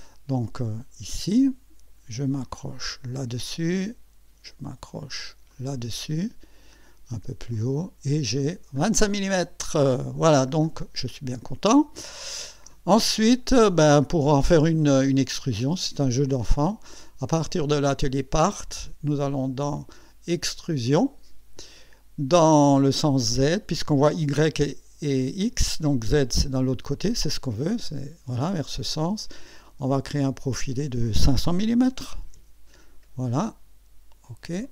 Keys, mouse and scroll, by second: 0.6 click, 3.1 click, 5.5 click, 6.1-6.6 scroll down 2, 6.8 scroll up 2, 7.5 click, 8.1-8.8 scroll down 4, 9.3 scroll up 2, 9.9-10.2 scroll up 2, 10.5 scroll down 2, 12.6 space, 13.0-13.3 scroll down 1, 13.6-14.3 scroll up 2, 15.1 scroll up 2, 16.9 click, 17.6 click, 20.9 click, 27.8 click, 30.1 click, 31.8 KP_5, 32.3 KP_0, 34.6 click.